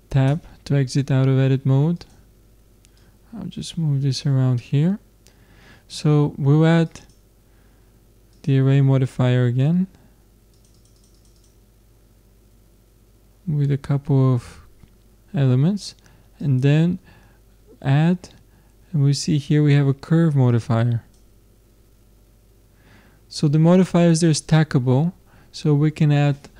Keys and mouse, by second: 0.3 Tab, 2.0-4.7 drag, 6.9-8.6 drag, 10.5-13.3 drag, 16.4-18.3 drag.